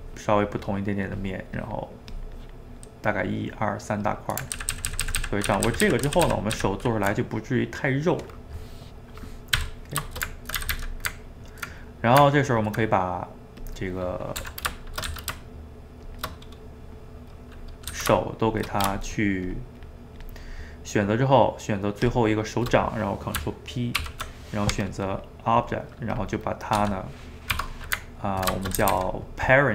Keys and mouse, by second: 1.0 middle click, 1.6-4.1 drag, 4.1 middle click, 4.6-5.2 ctrl+z, 5.7 ctrl+z, 5.9 ctrl+z, 6.1 ctrl+z, 6.3 ctrl+z, 6.6 ctrl+z, 7.3-9.6 middle drag, 9.6 w, 10.1 ctrl+shift+middle click, 10.6 a, 10.7 a, 10.9-13.7 middle drag, 13.7 click, 13.8 middle click, 14.5 r, 16.3-18.0 middle drag, 18.0 g, 19.1 shift+click, 19.5 shift+click, 20.3 shift+click, 22.1 shift+click, 24.0 ctrl+p, 25.8 middle click, 26.2 click, 26.8 g, 27.8-28.8 ctrl+middle drag, 28.8 a, 29.0 a, 29.1-29.7 middle drag.